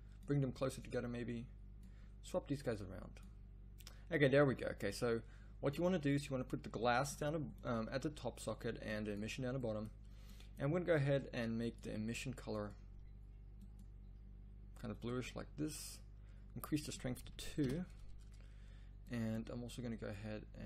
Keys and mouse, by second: 20.1-20.6 middle drag.